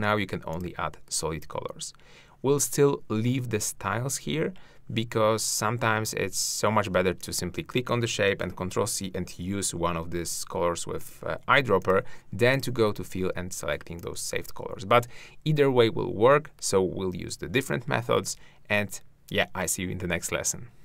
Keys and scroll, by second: 8.3 ctrl+c.